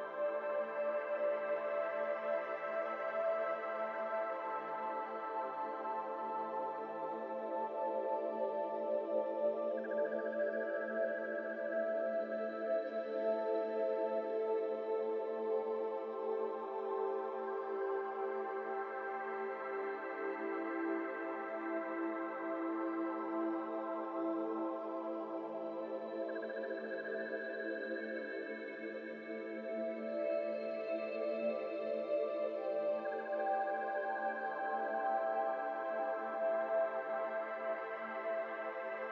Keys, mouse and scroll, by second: 1.5-3.9 drag, 4.9-5.6 drag, 5.6-6.4 middle drag, 6.4 click, 15.1 click, 16.3-17.7 drag, 17.7 scroll down 1, 18.0-19.2 middle drag, 19.2-19.5 scroll up 1, 19.5-20.0 middle drag, 20.0 ctrl+z, 20.4 shift+middle drag, 20.6 scroll up 1, 20.7 Tab, 21.3 3, 21.5 click, 22.4 shift+click, 23.3 shift+click, 25.4 scroll down 2, 25.5 middle click, 25.7-26.3 scroll up 1, 26.3 scroll up 1, 26.6-30.8 drag, 32.2 click, 34.1 ctrl+i, 35.2 click, 36.8-38.8 scroll down 2, 38.8 scroll down 1, 38.9 Tab.